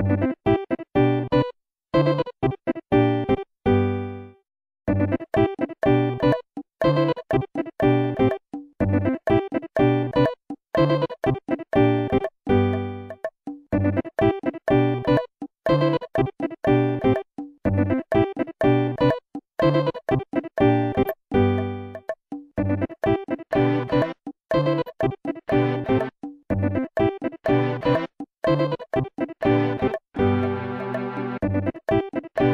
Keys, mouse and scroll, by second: 0.1 typing, 1.3 click, 1.9 scroll down 1, 3.1 middle click, 4.4 click, 5.0 click, 5.7 s, 11.7 scroll down 1, 13.8 scroll up 1, 14.6 scroll up 1, 15.9 scroll down 1, 24.7 click, 26.5-26.9 typing, 27.7 Return, 28.8 ctrl+z, 30.9 ctrl+z.